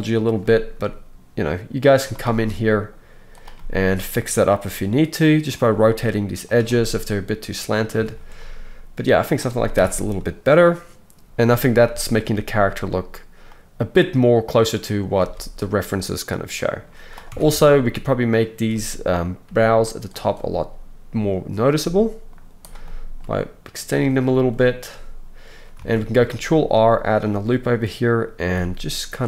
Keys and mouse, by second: 0.7 r, 3.3 click, 3.4-8.4 middle drag, 5.7 r, 7.9 Tab, 9.7 KP_1, 15.2 alt+a, 16.0-18.2 middle drag, 17.3 Tab, 18.3-18.8 drag, 19.4 g, 20.4-22.6 middle drag, 20.5 g, 22.6 drag, 22.8-29.2 middle drag, 24.2 g, 26.6 ctrl+r, 28.4 g.